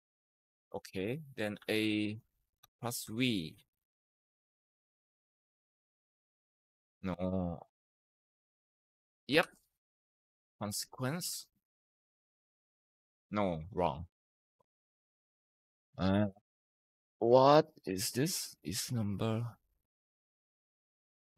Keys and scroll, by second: 0.2-2.9 typing, 9.2-11.5 typing, 12.5 ctrl+Return, 16.9 Escape.